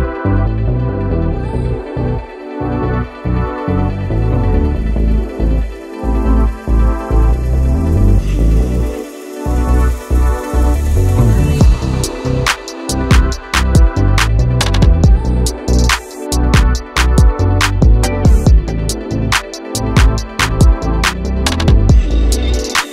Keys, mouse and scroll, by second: 0.9 KP_3, 1.2-2.6 shift+middle drag, 2.9 g, 4.3 click, 4.8 KP_1, 5.1 KP_3, 5.7 g, 7.2 e, 8.9-9.9 middle drag, 9.9 click, 10.4 s, 11.3-12.4 drag, 12.4 s, 13.1-14.4 middle drag, 14.4 click, 14.6 s, 15.4 Tab, 15.5 middle click, 16.4 click, 17.2-17.5 scroll down 3, 17.5-19.5 drag, 19.5 KP_1, 20.0 g, 20.7 s, 21.4-22.3 middle drag, 22.3 Return, 22.7 KP_1.